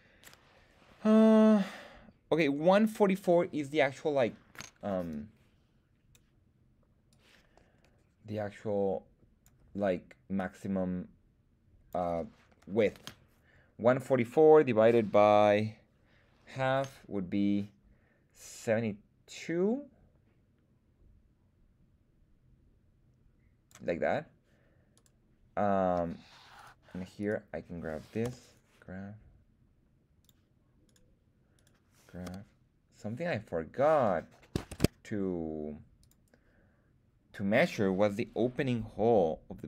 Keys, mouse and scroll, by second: 5.0-6.1 drag, 7.0-9.4 drag, 10.3-11.9 drag, 13.3 l, 19.3-23.6 drag, 24.9 right click, 26.5 right click, 27.2 right click, 28.2 g, 30.2 click, 30.8 click, 30.8 right click, 31.5 click, 31.5 right click, 32.2 g, 34.6 shift+Tab, 36.0 click.